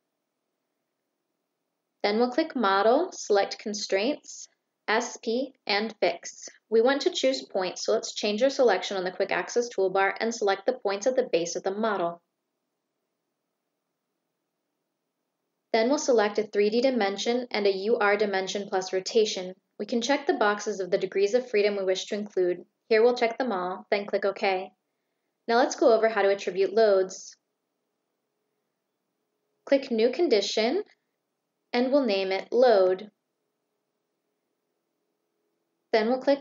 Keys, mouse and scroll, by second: 2.3 click, 5.6 click, 7.2 click, 9.3 click, 11.2 shift+click, 12.8 shift+click, 16.1 click, 16.7 click, 17.4 click, 18.6 click, 19.4 click, 21.0-21.4 drag, 21.8 click, 22.2 click, 22.8 click, 23.7 click, 26.8 click, 31.6 click, 32.8 click.